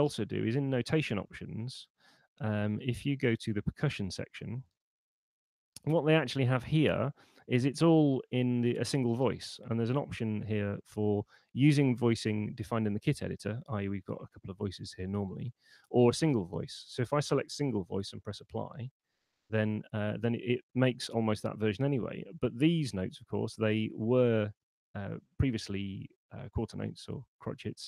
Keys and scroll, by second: 0.5 shift+super+n.